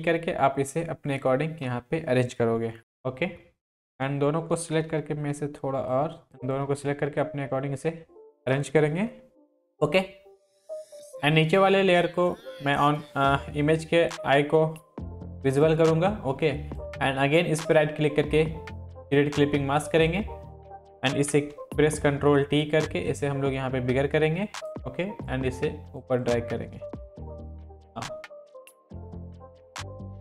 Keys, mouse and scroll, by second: 2.8 Up, 4.8 ctrl+t, 6.2-8.7 click, 9.3-9.8 drag, 15.5-17.6 drag, 17.6 right click, 19.9 click, 21.3 ctrl+t, 22.8-24.7 alt+drag.